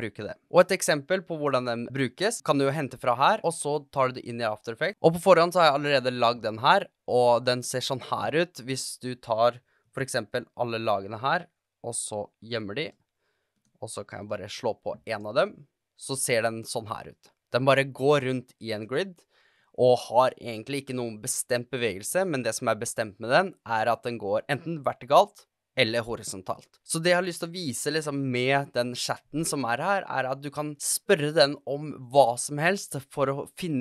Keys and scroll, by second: 9.7 super+a, 15.0 space, 26.8 super+a.